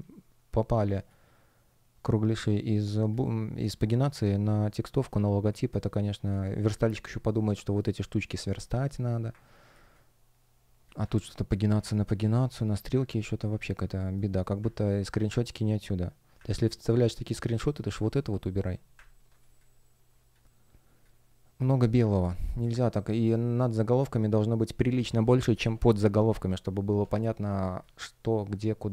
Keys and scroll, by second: 0.7 space, 5.4 space, 9.6 space, 11.0 super+space, 13.6 shift+o, 13.9 shift+g, 19.3 space, 23.1 shift+p, 27.4 space.